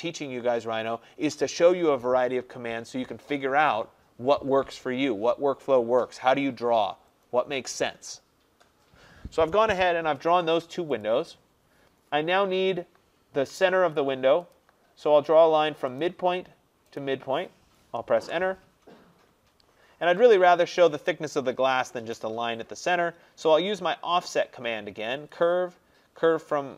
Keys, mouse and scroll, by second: 10.1-11.0 scroll, 11.1 click, 11.6-14.0 scroll, 14.6 click, 16.1 click, 17.0 click, 18.2 Return, 20.4 click, 21.8-22.2 middle click, 21.9 middle click, 22.0 middle click, 22.1 middle click, 23.6 middle click, 25.4 click.